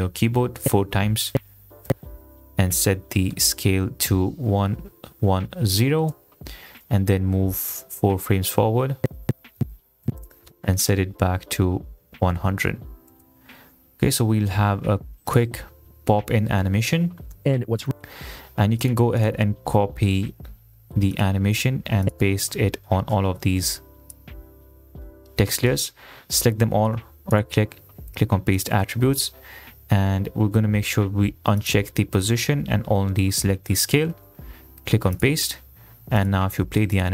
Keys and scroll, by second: 0.8 ., 1.5 ., 2.0 ., 4.7 1, 5.4 0, 6.0 Return, 9.2 ., 11.1 ., 11.7 1, 12.2 0, 13.1 Return, 17.5 space.